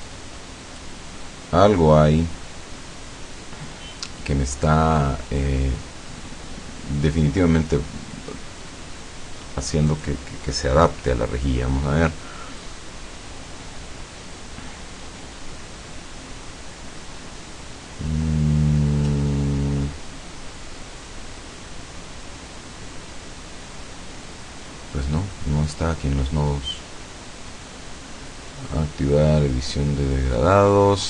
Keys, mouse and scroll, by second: 0.1-1.1 drag, 9.9 click.